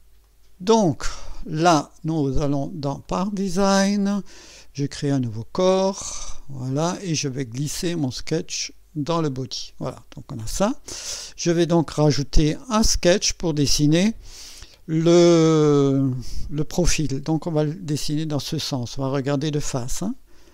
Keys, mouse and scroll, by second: 0.2-1.1 right drag, 2.3 click, 3.1 click, 5.1 click, 6.3 click, 7.6-8.8 drag, 12.8 click, 17.5 click.